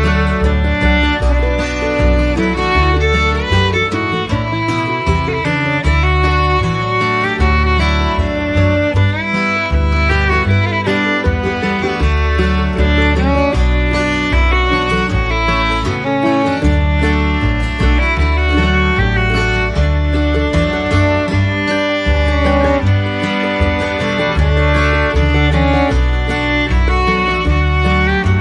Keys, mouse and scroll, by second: 15.2 right click.